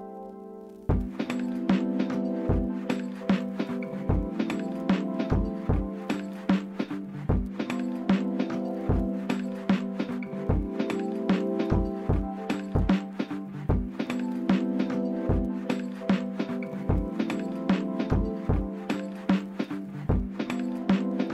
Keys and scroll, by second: 0.8-3.2 typing, 4.2 Escape, 4.5-5.9 typing, 7.6 d, 9.1-9.9 typing, 9.3 Return, 11.7 d, 12.8 5, 13.0 Return, 17.9-18.3 typing, 20.2-21.3 typing.